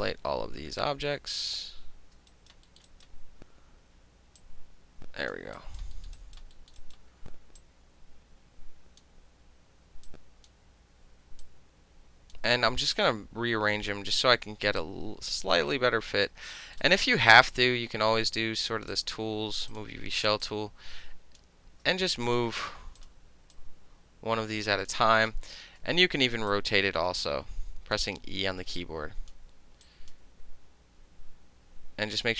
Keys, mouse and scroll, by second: 2.3 alt+middle click, 2.3 alt+right click, 2.7 alt+scroll down 1, 2.8-4.4 alt+middle drag, 2.9 alt+right click, 4.4 click, 5.6 alt+right click, 6.0 alt+middle click, 6.2 alt+right click, 6.6 alt+middle click, 6.8 alt+right click, 7.0-7.6 alt+middle drag, 7.6-9.0 alt+drag, 9.0-10.1 alt+middle drag, 10.1-10.5 alt+drag, 10.5-11.4 middle drag, 11.4-12.3 drag, 12.3-13.0 middle drag, 13.0-13.9 drag, 13.9-14.8 middle drag, 14.8 click, 16.1 alt+middle click, 16.3 alt+right click, 16.8-17.5 alt+middle drag, 16.8 alt+right click, 17.7 alt+middle drag, 18.9 alt+click, 19.7 alt+click, 20.4-21.4 alt+drag, 21.4-22.3 ctrl+middle drag, 21.7 ctrl+z, 22.3 click, 22.4-23.0 middle drag, 23.0 click, 23.1-23.5 middle drag, 23.5-24.9 drag, 24.9-26.5 middle drag, 25.8 e, 26.5-28.0 drag, 28.2 w, 28.8-29.3 drag, 29.9 click.